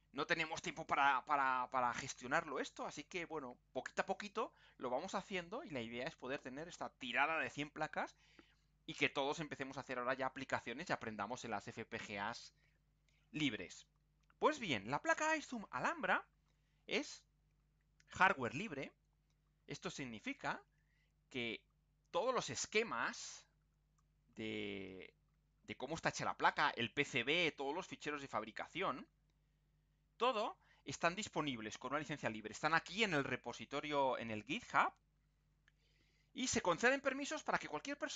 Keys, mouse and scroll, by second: 16.3-16.9 scroll down 2, 18.3-18.9 scroll up 2, 19.5-19.9 scroll down 2, 20.1-20.5 scroll down 2, 20.7-21.2 scroll down 2, 21.5-21.9 scroll down 2, 22.1 scroll down 2, 22.4 middle click, 23.9-30.5 drag, 31.3 click, 34.9-35.4 scroll down 1.